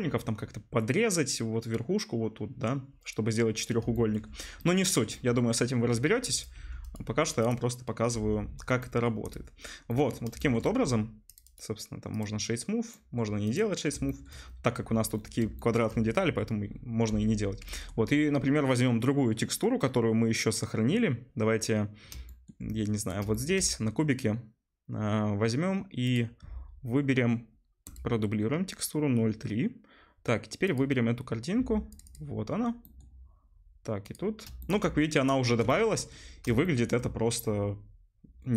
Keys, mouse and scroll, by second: 6.5 Tab, 6.5-8.5 right drag, 8.5 middle click, 8.5 click, 8.6 middle click, 9.2-11.3 middle drag, 11.3-12.9 drag, 12.9 middle click, 13.5-15.3 drag, 22.9 middle click, 23.5-26.1 shift+drag, 23.5 right click, 26.1 middle click, 26.2-28.0 right drag, 28.0-32.7 middle drag, 32.7-34.0 right drag, 34.0 middle click, 34.4-36.8 shift+middle drag, 34.7 right click, 36.8-38.5 shift+drag.